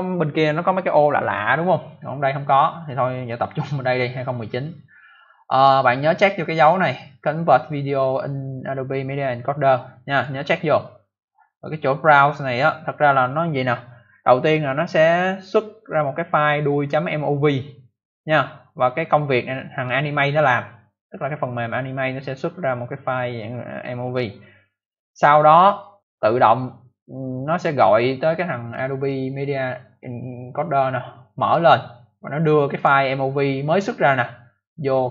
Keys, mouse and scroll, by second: 9.5 click, 9.6 click, 10.0 click, 10.1 double click, 28.6 click, 28.7 click, 32.7 click, 32.7 click, 35.0 click.